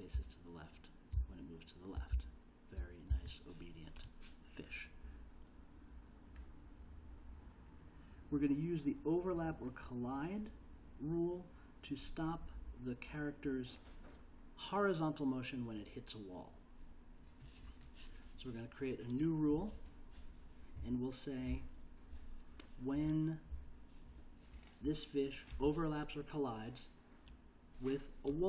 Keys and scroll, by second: 0.1 l, 1.1 j, 2.1 l, 3.1 j.